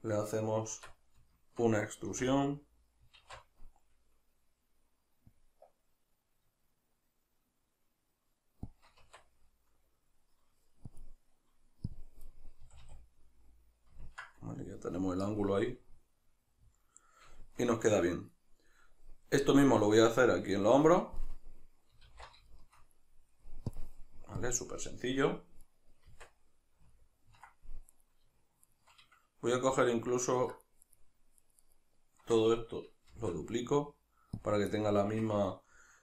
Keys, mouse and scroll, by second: 0.8 Tab, 1.4 shift+middle click, 2.1 a, 8.8 shift+click, 9.0 Tab, 9.5-10.9 middle drag, 10.9-12.4 drag, 12.4-23.7 middle drag, 12.7 a, 22.1 alt+q, 23.7-25.6 drag, 25.6 right click, 26.1 Tab, 26.9-27.9 ctrl+middle drag, 27.9-33.2 right drag, 33.2 shift+d, 34.5 click, 34.8-36.0 shift+middle drag.